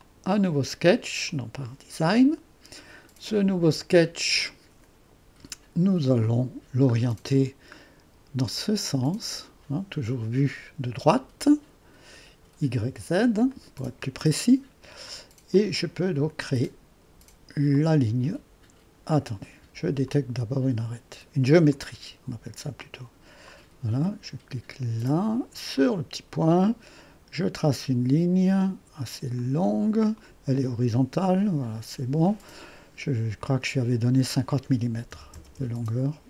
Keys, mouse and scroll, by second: 0.0 click, 1.3 click, 4.2-7.0 drag, 7.0-9.0 scroll down 1, 9.0-10.6 drag, 13.5-20.7 drag, 21.7 click, 23.5 click, 25.8 click, 29.4-35.1 drag, 34.9-35.8 typing.